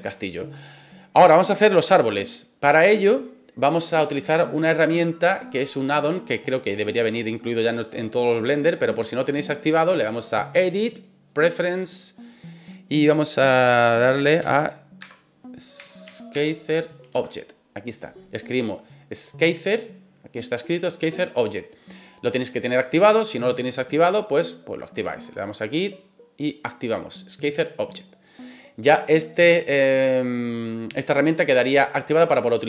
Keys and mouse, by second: 0.1-0.4 shift+middle drag, 0.6-1.5 middle drag, 10.5-11.5 drag.